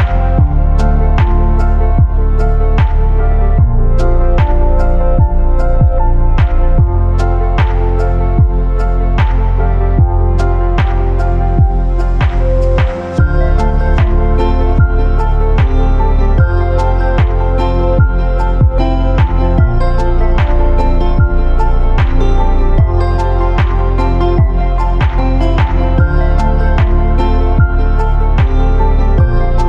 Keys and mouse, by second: 8.0-8.4 drag, 8.4 Tab, 8.8-9.7 drag, 9.8 Tab, 10.6 click, 11.0 3, 11.5 drag, 12.2-17.4 drag, 17.4 2, 19.3 click, 19.6 ctrl+z, 19.7-20.3 ctrl+drag, 20.4-22.5 drag, 22.7 ctrl+z, 22.9 ctrl+z, 23.1 ctrl+z, 23.3 ctrl+z, 23.8 ctrl+z, 24.4 ctrl+z, 25.2 ctrl+z, 25.6 ctrl+z, 25.9 a, 26.7 3, 27.0 click, 28.1-29.6 drag.